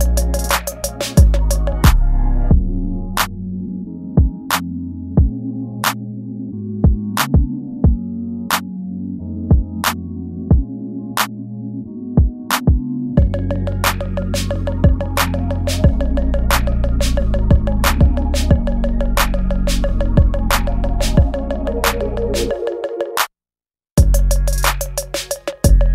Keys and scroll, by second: 0.0-0.1 typing, 1.8 space, 2.3 ctrl+z, 2.5 ctrl+z, 3.1 ctrl+z, 3.9 ctrl+z, 4.2-5.9 typing, 4.3 ctrl+z, 8.1 ctrl+s, 11.1 ctrl+z, 11.4-14.3 typing, 13.2 ctrl+z, 15.8 ctrl+s, 16.2 space, 17.1 ctrl+z, 17.4 space, 18.1 ctrl+z, 18.5 space, 18.7 ctrl+z, 19.1 space, 19.7 ctrl+z, 21.5 space, 21.7 space, 21.8 ctrl+z, 24.3 ctrl+s, 24.7-25.9 typing.